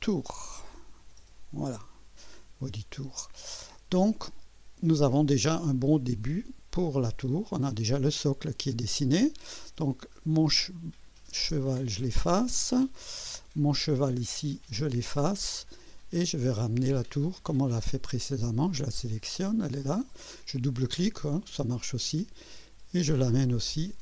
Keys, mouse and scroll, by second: 0.0-1.5 typing, 9.9 click, 11.4 space, 13.7 click, 14.6 space, 15.3-15.9 scroll down 2, 16.1-16.9 right drag, 18.6 click, 19.9 click, 20.5 click, 21.4 click, 23.1-24.0 drag.